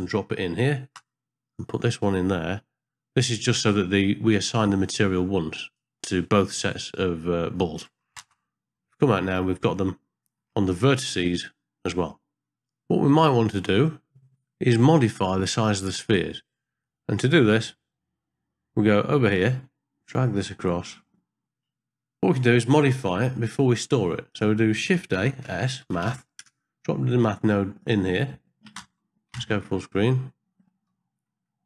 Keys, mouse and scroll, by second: 1.5 click, 1.7-3.5 drag, 4.6-5.7 drag, 8.3 ctrl+space, 9.7 ctrl+middle click, 10.8 middle click, 12.5 ctrl+middle click, 16.8 middle click, 18.9 middle click, 20.0-21.0 drag, 24.3 click, 25.2 shift+a, 29.3 ctrl+space.